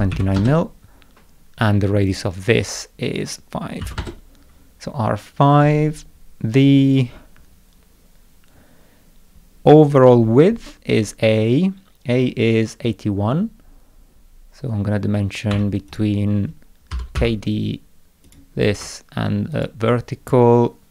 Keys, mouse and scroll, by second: 2.1 click, 11.9 scroll down 2, 13.0 scroll up 2, 15.5 Escape, 15.9 click, 16.7-17.7 typing, 18.3 click, 19.5 ctrl+click.